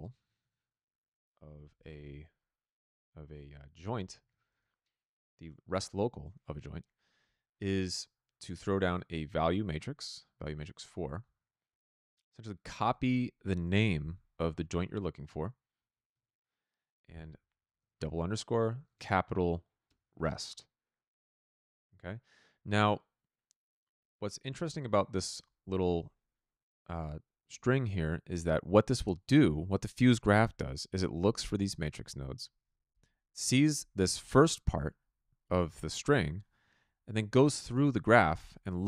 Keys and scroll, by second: 0.0-2.2 typing, 4.4 Return, 14.5 ctrl+c, 16.1 ctrl+v, 17.6-19.2 typing, 19.8 Return.